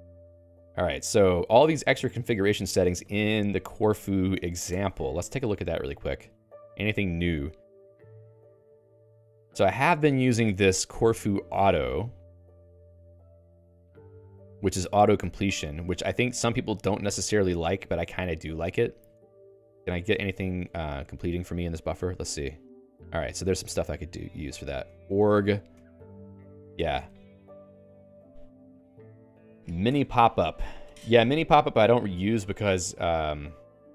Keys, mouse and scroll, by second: 1.7 Escape, 4.7 Return, 5.3 Page_Up, 6.7 Page_Down, 7.5 Up, 7.9 Page_Up, 8.9 Down, 9.7 Up, 10.9 Right, 11.9 Up, 14.1 Return, 15.3 q, 16.5 h, 17.9 k, 18.9 o, 19.1 Return, 19.5 alt+i, 20.1 BackSpace, 22.3 ctrl+alt+i, 24.0-26.8 typing, 26.2 Return, 27.8 Escape, 32.8 Escape, 33.4 j.